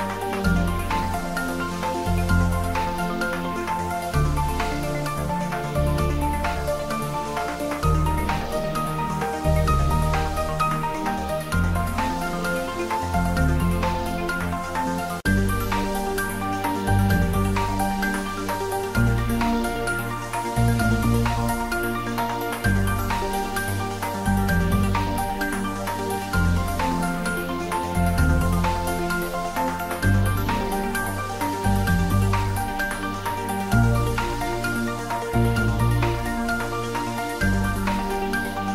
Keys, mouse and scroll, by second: 0.2 click, 1.3 middle click, 2.4 click, 5.7 click, 6.5 ctrl+s, 6.9 click, 8.4 middle click, 9.0 ctrl+middle click, 9.7 a, 10.1 click, 10.5 c, 11.7 o, 12.2 click, 13.7 ctrl+middle click, 14.2 middle click, 14.9 middle click, 15.0 ctrl+middle click, 15.7 middle click, 16.7-19.3 drag, 21.1 click, 25.1 click, 28.6 click, 30.0 click, 30.8 ctrl+s, 31.4 click, 35.3-38.6 drag.